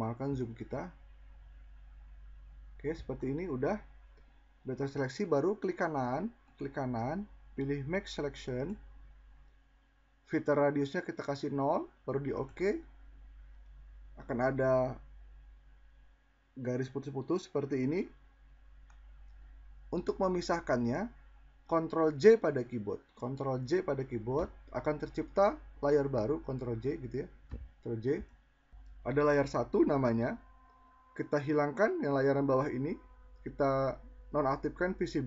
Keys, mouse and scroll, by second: 22.0 ctrl+j.